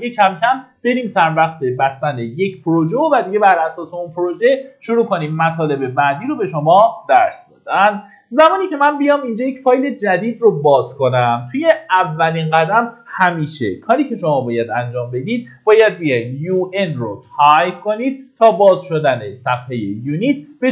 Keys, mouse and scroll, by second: 9.0 middle click, 14.7-15.6 typing.